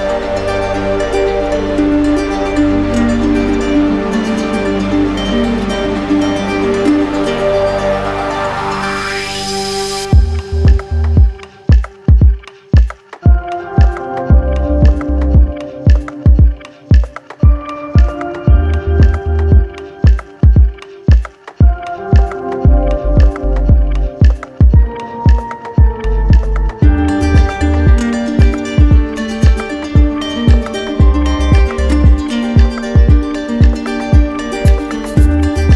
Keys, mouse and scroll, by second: 1.3 alt+click, 1.9 alt+click, 5.3 click, 12.0 click, 12.2 shift+click, 13.5 click, 14.3 click.